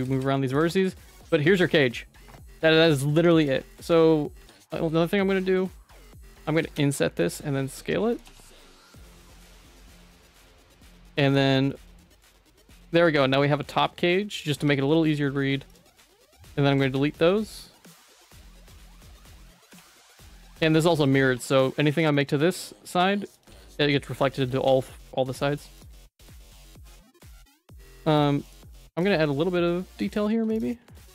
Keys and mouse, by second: 0.7 Tab, 1.0 middle click, 3.1 Tab, 3.3 3, 3.7 shift+middle click, 4.4 i, 6.5 s, 8.3 Tab, 8.7 middle click, 8.9 Tab, 9.2 g, 11.1 Tab, 11.7 middle click, 12.2 shift+middle click, 12.7 ctrl+s, 13.2 middle click, 13.6 shift+middle click, 14.0 middle click, 14.5 Tab, 14.6 2, 14.9 shift+middle click, 15.7 alt+click, 16.4 shift+click, 16.8 ctrl+x, 16.9 Tab, 17.0 middle click, 18.2 Tab, 18.7 click, 19.5 ctrl+x, 19.7 Tab, 19.9 middle click, 20.3 shift+middle click, 20.9 ctrl+s, 21.3 Tab, 21.9 1, 22.4 g, 23.4 Tab, 24.0 middle click, 24.4 ctrl+z, 24.5 ctrl+z, 24.8 middle click, 25.3 middle click, 26.0 shift+middle click, 26.7 2, 26.8 click, 27.1 right click, 27.8 middle click, 28.4 right click, 30.1 click, 30.3 1, 30.5 click.